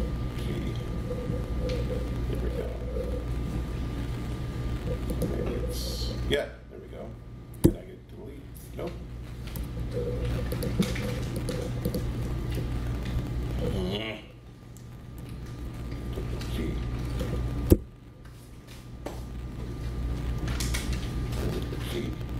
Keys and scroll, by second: 7.6 BackSpace, 9.5 super+z, 16.1 alt+shift+g, 17.7 BackSpace, 21.7 alt+g.